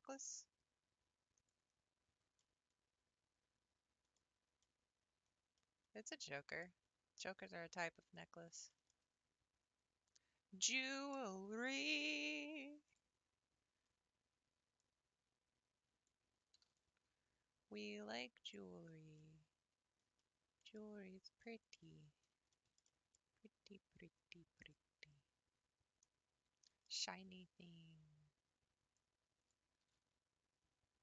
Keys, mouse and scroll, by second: 1.7 scroll down 2, 2.1 Tab, 2.4-4.1 middle drag, 4.1-4.6 scroll down 2, 4.7-6.9 middle drag, 6.9 scroll up 3, 8.2 click, 8.8 shift+middle click, 9.3-9.6 scroll up 2, 10.8 Tab, 11.3-12.9 shift+middle drag, 12.9 click, 13.2-13.8 scroll up 4, 16.1 click, 16.6 g, 18.7-19.2 scroll down 8, 19.2-21.0 middle drag, 21.0-21.4 scroll up 2, 21.4 middle click, 22.1-22.5 scroll up 3, 22.5-24.7 shift+middle drag, 24.7 click, 25.2-25.9 scroll up 2, 26.1-26.5 scroll down 7, 26.6 shift+middle click, 27.2-28.5 scroll up 8, 29.5 click, 29.9 g.